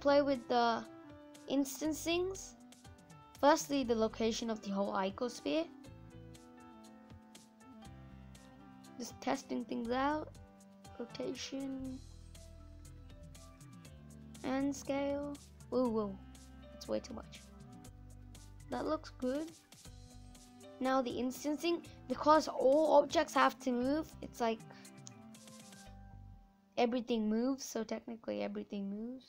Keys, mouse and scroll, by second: 3.4-7.2 drag, 7.2-7.6 scroll down 2, 8.2-17.3 drag, 17.3 scroll down 1, 17.5 middle click, 18.4 scroll up 3, 18.5-20.0 middle drag, 20.0-23.0 drag, 24.7-28.2 drag, 28.7 middle click.